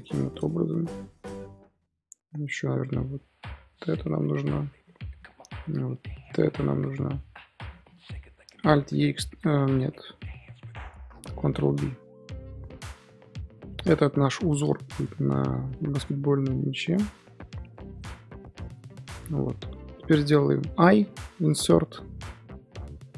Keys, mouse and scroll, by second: 0.2 shift+middle click, 0.4-3.4 scroll up 1, 3.7 alt+shift+click, 4.8-6.2 shift+middle drag, 6.2 alt+shift+click, 7.3-7.6 scroll down 1, 7.6 shift+middle click, 8.5 alt+e, 10.1-11.6 scroll up 1, 11.6 ctrl+b, 17.8 scroll down 3, 17.9-19.2 middle drag, 19.2-19.9 scroll up 2, 19.9-21.4 middle drag.